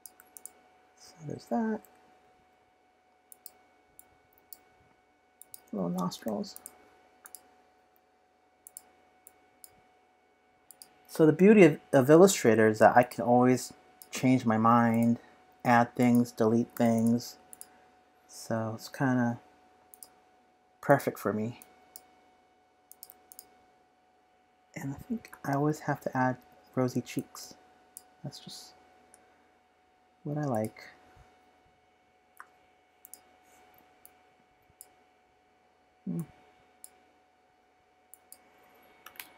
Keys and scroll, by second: 7.9 typing, 10.6 typing, 12.6 typing, 16.7 i, 25.1 typing.